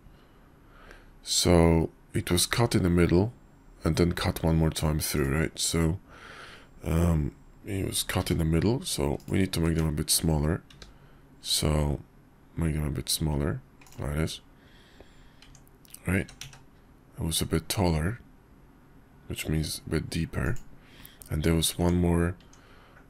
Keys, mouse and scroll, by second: 8.2 s, 9.6 Tab, 10.7 s, 15.4 Tab, 16.2 s, 21.7 Tab, 22.4 Tab.